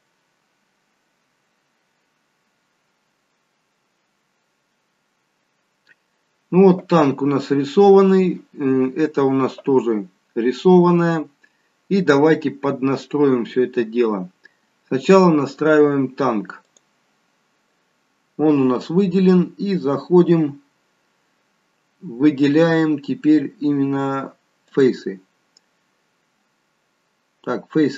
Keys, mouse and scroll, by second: 20.7-21.1 scroll down 4, 24.7 click, 25.4-26.5 scroll down 2, 26.5-27.4 scroll down 2.